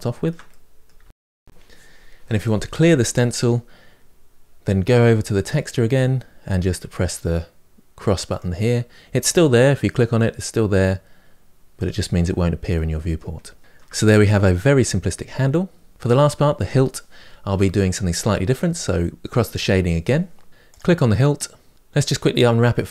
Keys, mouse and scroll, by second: 0.6 middle click, 1.0-2.4 scroll down 1, 2.4 scroll down 2, 9.1-12.5 drag, 12.5 middle click, 13.2-13.6 scroll down 4, 13.6-22.9 shift+middle drag, 19.3 click, 20.5 click.